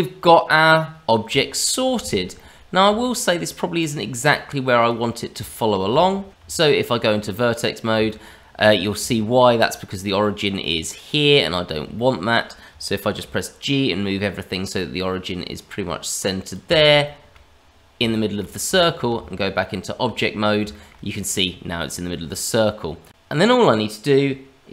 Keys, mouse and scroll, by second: 0.2-0.8 scroll up 1, 0.8-1.2 scroll down 1, 1.2 middle click, 2.3 middle click, 3.0 shift+middle click, 3.7 click, 4.7 click, 5.4 shift+middle click, 6.0 shift+z, 6.4 Tab, 8.1 shift+middle click, 8.7 scroll up 2, 9.1 shift+middle click, 11.9 shift+middle click, 13.2 g, 17.0 shift+middle click, 18.1 shift+middle click, 18.8 shift+middle click, 19.1 Tab, 20.7 shift+middle click, 22.9 scroll down 1, 23.1 ctrl+z, 23.1 click, 23.1-24.2 scroll up 2.